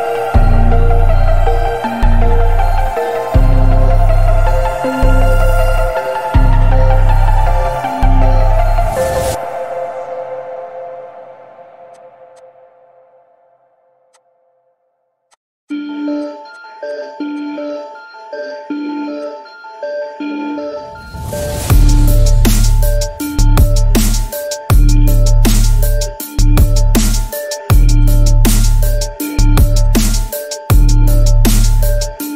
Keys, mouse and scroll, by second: 0.4-0.8 alt+scroll up 1, 2.3 click, 3.4 alt+scroll down 1, 3.6 space, 3.6-4.1 click, 4.1 space, 4.2 alt+scroll up 1, 4.4 space, 4.5-4.8 click, 4.8 space, 4.9-5.5 click, 5.6 alt+scroll up 1, 6.6 click, 8.2-8.5 click, 9.2-9.6 alt+scroll up 1, 9.9-10.7 alt+right click, 11.9-12.2 click, 13.0 alt+right click, 14.1 click, 15.3 click, 17.7-18.2 alt+scroll up 1, 18.8 x, 19.2 click, 19.7 ctrl+z, 20.1 alt+scroll up 1, 20.3-21.2 alt+right drag, 22.3 click, 23.0-24.1 alt+scroll down 2, 24.1 alt+scroll down 1, 24.8 alt+scroll down 1, 25.0-25.4 alt+scroll up 2, 25.4-26.8 alt+scroll down 3, 28.0-29.6 drag.